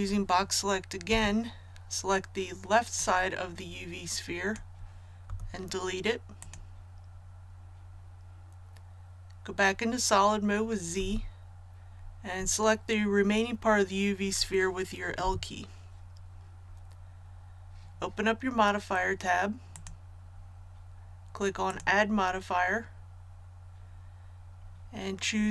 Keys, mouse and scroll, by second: 1.0 b, 2.9-4.6 drag, 5.2 x, 6.3 click, 10.9 z, 15.1 l, 19.7 click.